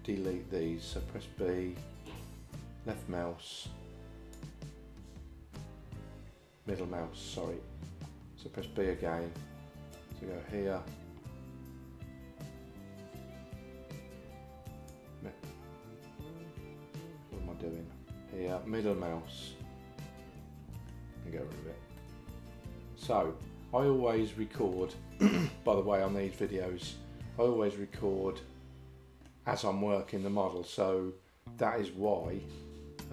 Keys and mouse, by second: 1.0 b, 8.9 b, 17.4 b, 22.0-24.8 middle drag, 28.0-29.3 middle drag, 32.1-33.1 middle drag.